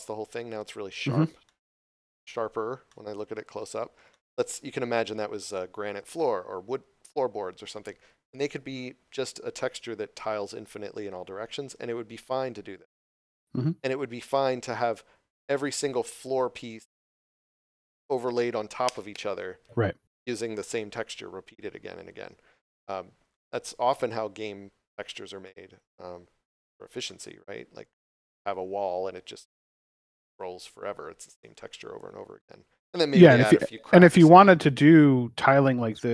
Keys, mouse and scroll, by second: 1.1 scroll down 1, 1.4 shift+middle click, 2.2 scroll down 1, 2.8 middle click, 3.6 scroll down 1, 4.1 shift+middle click, 13.3 scroll up 1, 23.1 scroll down 1, 23.2 scroll up 1, 25.4 middle click, 32.8 scroll up 1.